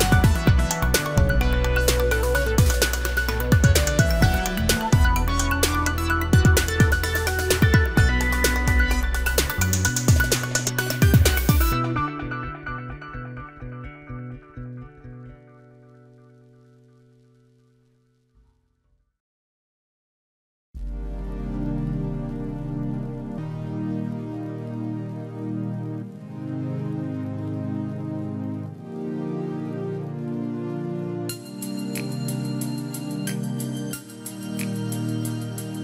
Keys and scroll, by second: 28.1 ctrl+g, 31.5 ctrl+j, 33.8 ctrl+e.